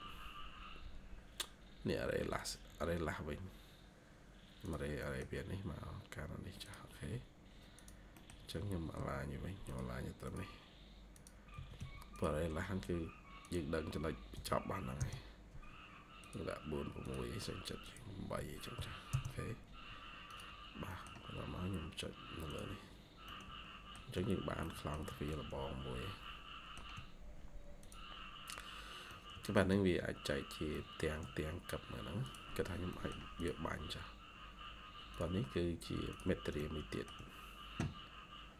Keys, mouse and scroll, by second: 3.4 scroll up 1, 4.9 middle click, 8.0 middle click, 8.4 a, 11.4 Escape, 11.7 Escape, 12.3 scroll down 1, 14.2 4, 14.9 Return, 18.6 8, 19.0 Return, 20.6-21.1 scroll down 2, 20.8 middle click, 23.1 middle click, 24.0-24.3 shift+scroll down 2, 24.5 middle click, 24.9 shift+scroll down 1, 25.2 shift+middle click, 25.4 shift+scroll, 29.0 middle click, 29.6 shift+scroll up 1, 30.6 middle click, 32.8 middle click, 36.0 ctrl+click, 36.5 shift+middle click.